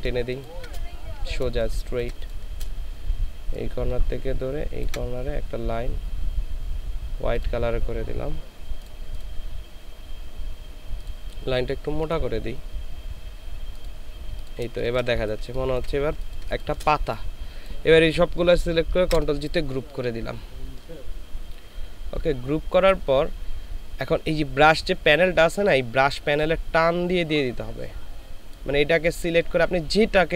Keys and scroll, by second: 0.1 ctrl+space, 1.5 space, 16.2 ctrl+space, 19.0 ctrl+g.